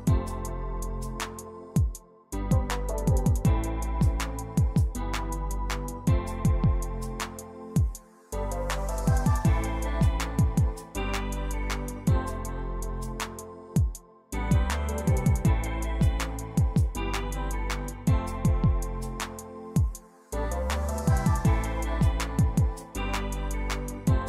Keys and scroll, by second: 5.1 e, 7.1-8.1 typing, 10.6 ctrl+a.